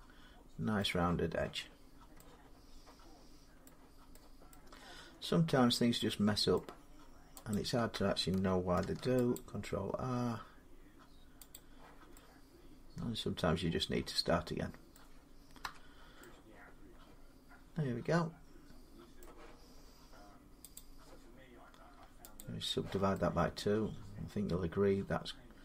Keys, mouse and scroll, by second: 0.6 middle click, 1.7 scroll down 2, 3.4 middle click, 4.0-4.3 scroll, 4.8 Tab, 5.3 Tab, 5.6 middle click, 5.6 scroll down 2, 5.7 scroll, 6.0 middle click, 6.0 scroll up 1, 6.4 middle click, 7.3 click, 8.6 ctrl+r, 9.1 click, 11.4 click, 14.7 middle click, 15.4 Tab, 19.0 middle click, 20.5 click, 22.2 click.